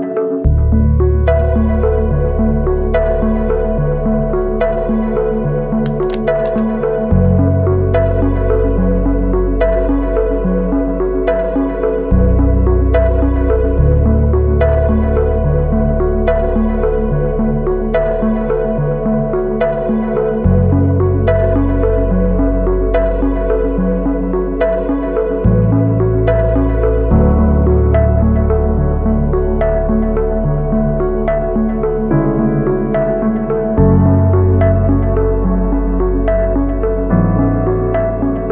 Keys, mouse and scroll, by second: 15.3 ctrl+t, 16.2 alt+shift+click, 18.5 alt+shift+click, 26.7 Return, 27.8 Up, 27.9 Up, 28.1 Up, 28.2 Up, 28.4 Up, 28.7 Up, 33.6 ctrl+r, 34.5 ctrl+r, 35.0 ctrl+r, 35.8 ctrl+t.